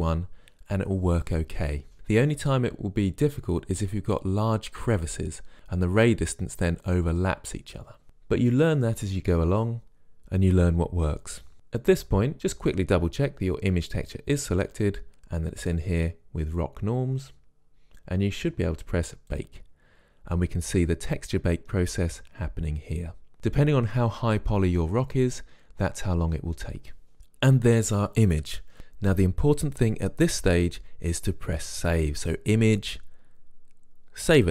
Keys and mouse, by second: 19.6-31.5 drag, 32.6-34.5 drag.